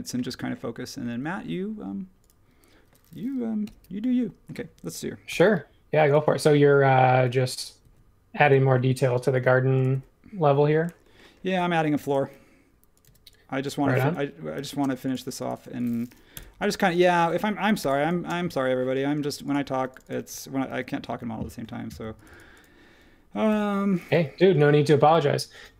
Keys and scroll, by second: 3.6 |, 4.6 space, 7.8 ⟲, 13.0 e, 14.5 super+z, 16.3 BackSpace, 17.8 e, 20.7 super+g, 23.5 super+1, 25.0 |.